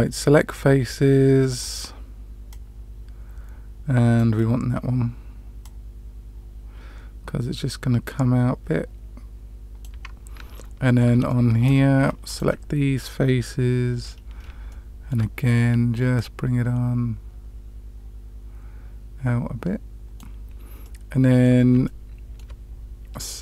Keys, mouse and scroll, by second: 1.5 click, 2.4-4.3 drag, 5.6-9.8 drag, 10.5 middle click, 11.2 shift+middle click, 12.2 alt+click, 13.9-14.4 scroll up 3, 14.6 shift+middle click, 16.1-20.1 drag, 20.8 middle click, 21.8 shift+middle click.